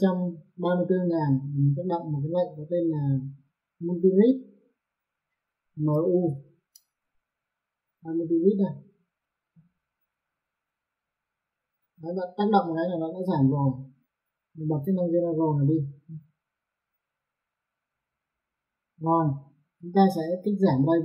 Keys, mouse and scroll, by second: 1.1 click, 4.5 click, 5.8 m, 10.0 click, 14.6 click, 18.0 click.